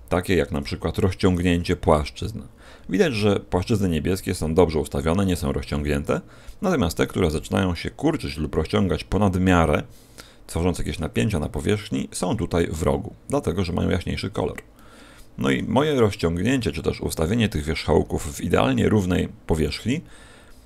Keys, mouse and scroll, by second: 1.2 click, 8.2 middle click, 14.2-15.9 scroll up 4, 14.7 middle click.